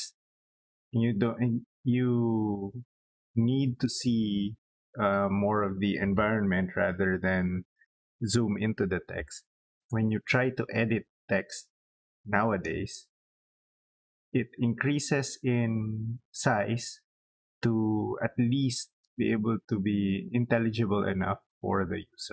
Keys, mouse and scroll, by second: 12.2 click, 12.4 click.